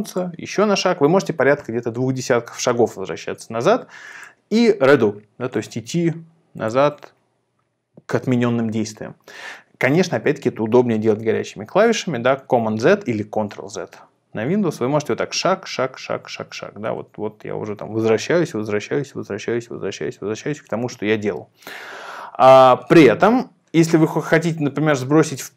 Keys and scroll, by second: 11.2 super+z, 11.8 super+z, 12.7 super+z, 13.7 super+z, 14.4 super+z, 15.0 super+z, 15.3 super+z, 15.7 super+z, 15.9 super+z, 16.9 super+z, 17.3 super+z, 17.8 super+z, 18.2 super+z, 18.9 super+z, 19.2 super+z, 19.7 super+z, 20.0 super+z.